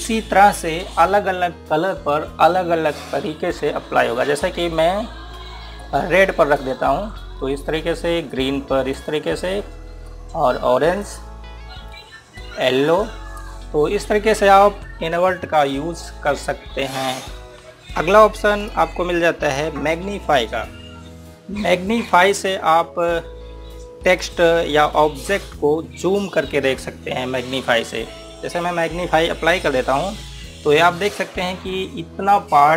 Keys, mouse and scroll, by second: 0.4 scroll down 1, 5.8 scroll up 1, 6.6 click, 8.7 scroll down 1, 9.1 click, 10.1-10.4 scroll down 1, 10.8 click, 12.4 scroll up 1, 13.1 click, 14.4 scroll down 1, 19.4 click, 24.7 click, 30.2 click, 31.1 scroll up 1.